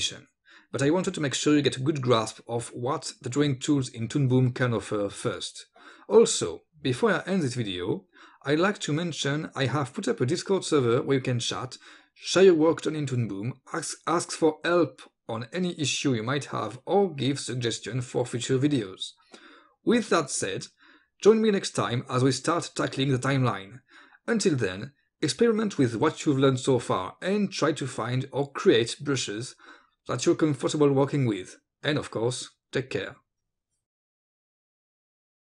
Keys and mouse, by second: 0.0-5.0 typing, 0.5 click, 0.9 click, 1.0 click, 1.3 ctrl+alt+space, 1.4 ctrl+z, 1.8 click, 1.9 click, 2.3 click, 2.5 ctrl+z, 2.6 click, 2.7 click, 3.1 click, 3.3 click, 3.4 click, 3.9 click, 4.1 click, 4.5 click, 4.7 click, 4.9 ctrl+z, 5.0 click, 5.1 click, 5.5 click, 5.7 click, 6.1 click, 6.2-9.9 typing, 6.3 click, 6.5 click, 6.8 click, 6.9 click, 7.0 click, 7.2 click, 7.5 click, 7.6 ctrl+z, 8.1 click, 8.3 click, 8.5 click, 8.8 click, 9.0 click, 9.5 click, 9.7 ctrl+z, 9.9 click, 10.1 click, 10.5 ctrl+space, 10.7 ctrl+z, 10.9 click, 11.0 click, 11.0-13.1 typing, 11.2 click, 11.5 ctrl+z, 11.5 click, 11.6 ctrl+z, 11.7 click, 11.9 click, 12.4 click, 12.7 click, 12.8 ctrl+z, 12.9 click, 13.1 click, 13.7 click, 14.2 click, 14.3 click, 14.6 click, 14.6-16.6 typing, 14.8 click, 15.3 click, 15.7 click, 16.0 click, 16.3 click, 16.5 click, 16.9 click, 17.2 click, 17.7 click, 17.8 d, 18.4 click, 18.5 space, 18.7 click, 18.9 d, 19.0 click, 19.1 space, 19.3 click.